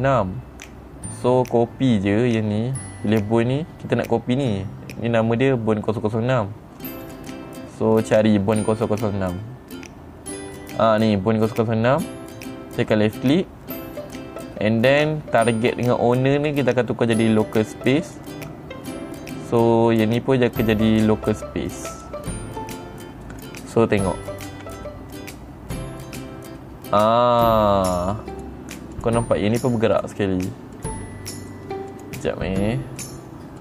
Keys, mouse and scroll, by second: 4.9 click, 7.6 click, 8.7 click, 13.4 click, 16.9 click, 18.6 click, 20.4 click, 22.4 click, 23.9 click, 25.2 r, 28.9 right click, 29.5 click, 29.9 r, 30.5 right click, 31.3 click, 32.4 click, 33.5 click.